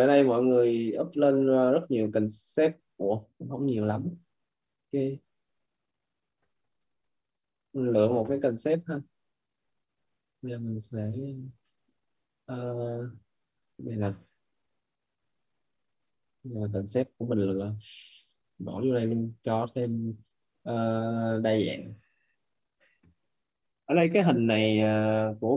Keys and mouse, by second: 5.3 click, 9.3 click, 11.4 middle click, 13.4 click, 17.0 Delete, 18.8 click, 19.6 middle click, 21.5 click, 23.9 click.